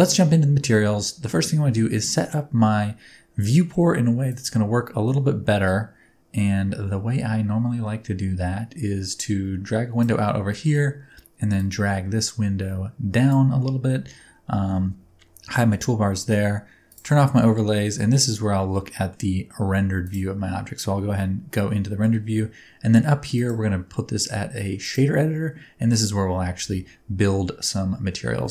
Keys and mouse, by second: 4.2-10.0 drag, 11.6-13.3 drag, 14.5 n, 14.6 t, 16.8 click, 17.6-19.1 middle drag, 20.4 click, 21.2 middle click, 23.4-24.9 drag, 26.6 n.